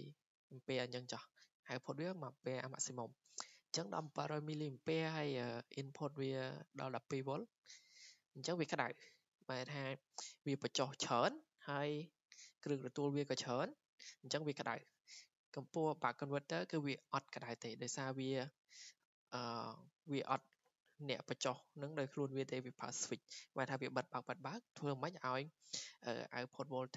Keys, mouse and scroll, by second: 15.4-20.5 drag.